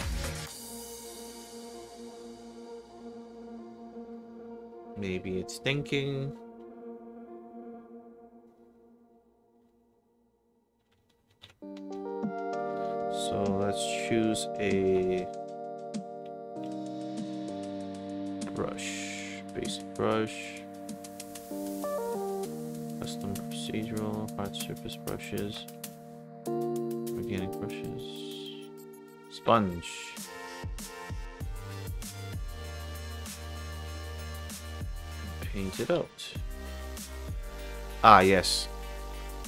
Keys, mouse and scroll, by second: 9.7 alt+middle click, 10.3 alt+click, 11.3 ctrl+shift+c, 12.0 ctrl+alt+shift+middle click, 12.4 ctrl+alt+shift+click, 14.3 click, 14.4 k, 15.4 j, 16.6 k, 18.3 click, 18.5 k, 19.4 click, 19.9 click, 20.0 k, 20.7 click, 22.4 click, 22.5 k, 23.4 click, 23.6 k, 24.2 click, 24.3 k, 26.7 click, 26.9 k, 27.4 click, 27.6 k, 28.0 click, 28.2 k, 29.1 click, 29.2 k, 30.4 alt+middle click, 30.9 alt+click, 31.3 alt+middle click, 31.8 alt+click, 32.4 alt+middle click, 33.0 alt+right click, 33.4 alt+click, 33.7 alt+middle click, 35.0 alt+click.